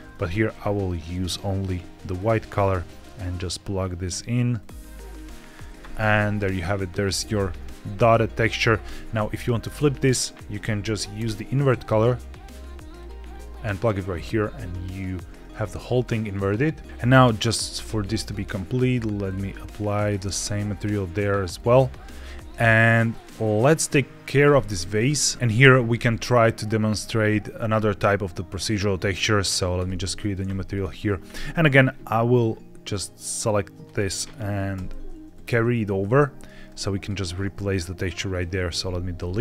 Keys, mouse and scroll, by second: 0.4 click, 3.2 click, 4.5 click, 5.9-7.1 scroll down 4, 7.2 shift+middle click, 7.7-9.0 scroll up 1, 9.0 middle click, 9.7 shift+a, 16.8-17.3 scroll down 1, 17.3 click, 18.1 click, 19.9 click, 20.7 click, 22.3-23.7 scroll down 1, 24.3 click, 25.4 click, 25.8 shift+middle click, 29.6 click, 30.6 click, 31.3 middle click, 31.6-32.3 scroll down 3, 32.3-33.7 drag, 34.6 ctrl+c, 35.2 click, 35.8 ctrl+v, 36.5 click, 38.2 click, 38.7 x, 39.1 middle click.